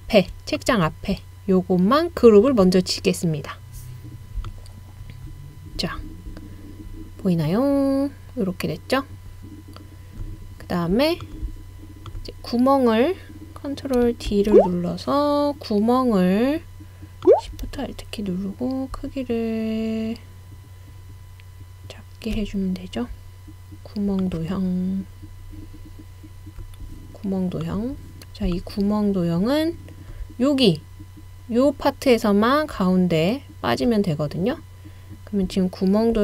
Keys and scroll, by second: 14.3 super+d.